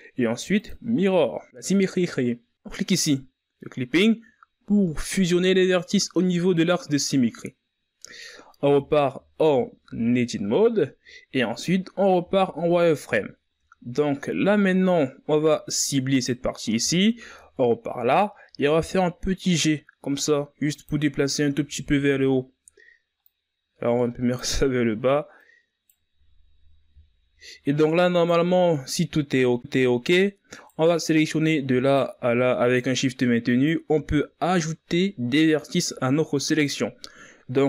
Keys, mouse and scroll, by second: 3.8 click, 5.8-6.4 ctrl+scroll down 2, 6.4-9.5 scroll up 3, 9.5 Tab, 9.9-10.5 scroll down 3, 10.5-11.7 ctrl+scroll up 1, 11.7-12.3 shift+scroll down 2, 12.3-13.0 scroll up 3, 13.0 z, 14.0-14.7 shift+scroll down 3, 14.7-16.1 scroll up 2, 16.1 z, 16.9 right click, 17.6 z, 19.3 g, 22.4 z, 24.0-26.2 drag, 26.2 right click, 27.0 z, 27.7 z, 29.0 right click, 30.9 right click, 32.2 shift+right click, 33.0 shift+right click, 33.9 shift+right click.